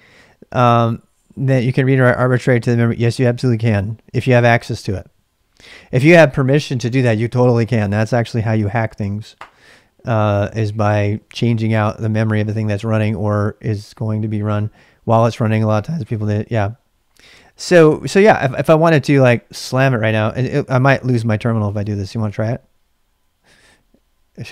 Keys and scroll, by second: 20.3-22.7 typing.